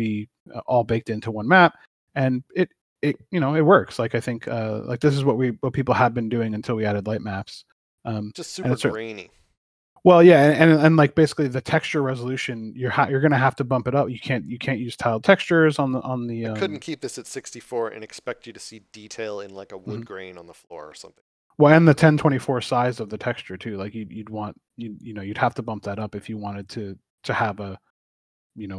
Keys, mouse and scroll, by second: 14.6 scroll up 1, 20.8 scroll up 1, 21.2 shift+middle click, 22.9 scroll down 1, 24.7 middle click, 26.2 scroll up 1, 27.7 scroll down 1.